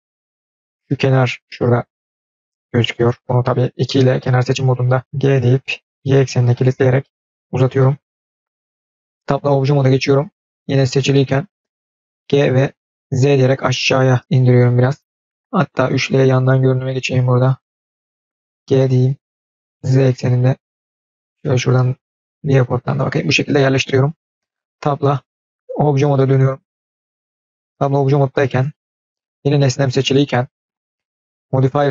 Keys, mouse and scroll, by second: 0.4 click, 4.0 click, 4.0 2, 8.3 scroll down 1, 8.4 middle click, 8.9 scroll down 1, 9.0 scroll up 1, 9.0 middle click, 9.2 ctrl+z, 9.2 Tab, 12.1 g, 15.6 KP_3, 16.2-16.9 scroll up 6, 16.9 scroll down 2, 17.2-17.6 scroll up 1, 24.5 Tab, 25.1 Tab, 27.6-28.6 middle drag, 28.6-29.4 scroll down 4, 29.4-30.0 middle drag, 31.0 click.